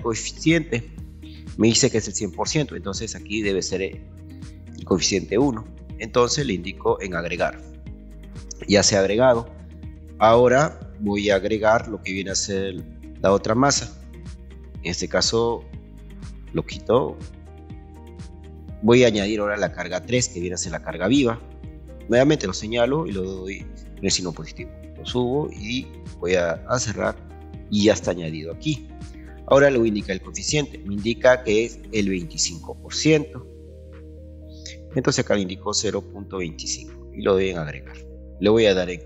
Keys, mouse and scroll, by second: 0.3 ctrl+click, 10.6 click, 12.7 click, 12.9 click, 14.7 click, 16.4 click, 17.6 BackSpace, 20.3 click, 24.4 click, 26.7 click, 33.2 click, 34.7 BackSpace, 35.7 KP_0, 35.9 KP_0, 36.2 KP_1, 37.9 click.